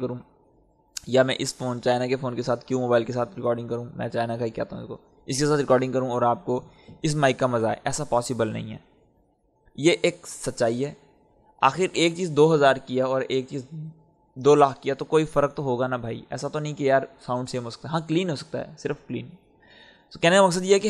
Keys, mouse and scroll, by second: 20.3-20.8 drag.